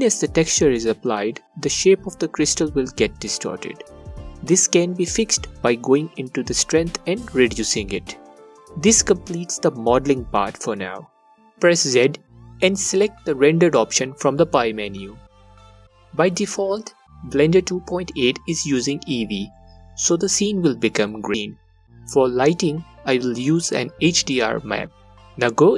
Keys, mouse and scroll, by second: 0.0-2.7 drag, 3.7 click, 5.1-7.9 alt+drag, 10.9 z, 12.9 click, 14.0-20.9 alt+drag, 22.4 click, 24.8 click.